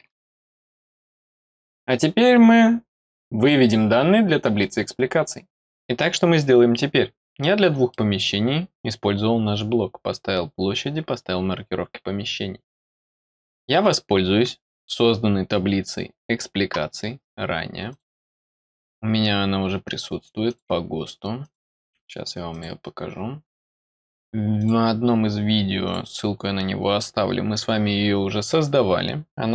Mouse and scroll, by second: 2.1-2.8 scroll down 2, 2.8-3.4 scroll down 1, 7.4 middle click, 17.9 click, 18.7 click, 20.4 click, 21.4 click, 22.5 click, 23.3 scroll down 1, 23.6 middle click, 24.5 click, 25.8 click.